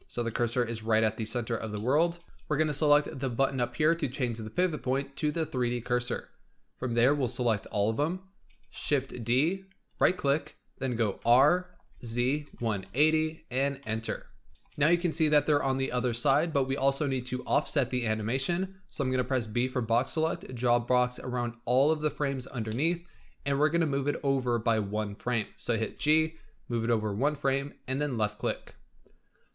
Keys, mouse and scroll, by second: 1.6-2.2 shift+middle drag, 3.1-6.3 drag, 6.8 b, 8.2-8.7 scroll down 3, 8.7 shift+d, 11.1 r, 14.5-18.9 shift+middle drag, 18.9 b, 22.2-23.8 scroll up 12, 22.6 middle click, 25.8 g.